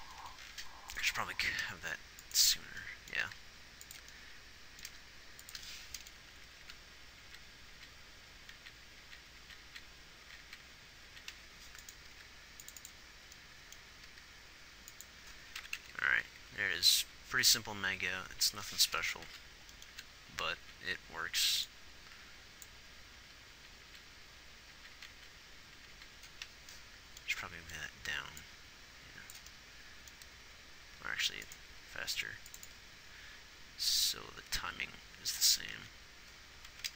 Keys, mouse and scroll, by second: 1.9 g, 3.7 g, 6.9 Left, 7.1 Left, 8.1 Right, 9.0 Right, 9.4 Right, 9.8 Right, 10.0-10.9 Right, 14.5 g, 16.0 Down, 16.0-16.8 Left, 17.4 Right, 17.7 Right, 19.8 Left, 20.3 Left, 20.7 Right, 21.0 Right, 23.2 Left, 23.5 Left, 23.9 Right, 24.3-25.5 Right, 26.1 Right, 32.1 g, 36.2 alt+a.